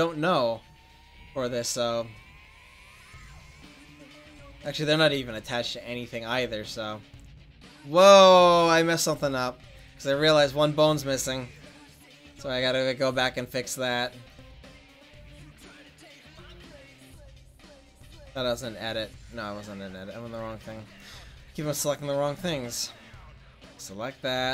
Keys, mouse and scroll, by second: 3.8 r, 13.0-14.2 drag, 14.2 right click, 15.8 click, 16.5 middle click, 17.5-18.7 right drag, 19.8 click, 22.2 click, 23.1-23.7 right drag, 24.3 click.